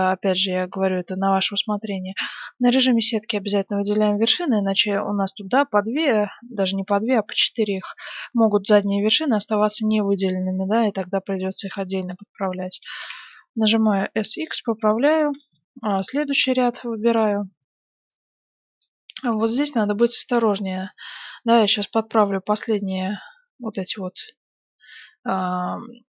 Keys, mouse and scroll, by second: 0.3 z, 0.9 a, 1.1 b, 3.3 b, 4.9-6.7 middle drag, 8.3 middle click, 10.6 KP_1, 11.0-13.7 middle drag, 12.9 s, 15.3 a, 15.8 n, 15.9-17.7 drag, 16.4 n, 16.7 b, 17.8 b, 19.3-20.5 middle drag, 21.0-23.6 middle drag, 23.9-26.0 middle drag.